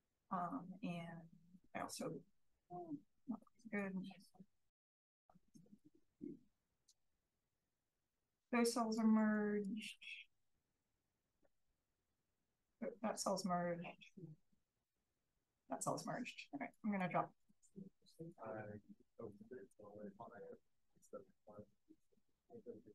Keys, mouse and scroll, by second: 0.1 drag, 1.5 click, 2.6-2.9 drag, 3.3 click, 4.1 click, 4.8 click, 5.4 click, 6.2 click, 7.0 click, 8.9 click, 9.6 click, 11.2-11.7 drag, 12.1-12.7 drag, 13.5-14.2 scroll up 1, 13.6-14.2 drag, 14.4 click, 15.1 click, 16.7 click, 18.2 click, 19.2 click, 19.7 click.